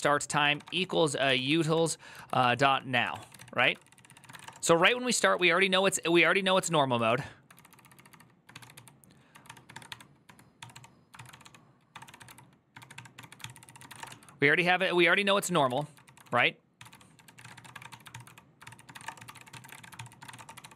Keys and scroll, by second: 0.0-5.1 typing, 5.1 ctrl+u, 5.6 ctrl+u, 6.3 ctrl+u, 7.3-20.7 typing.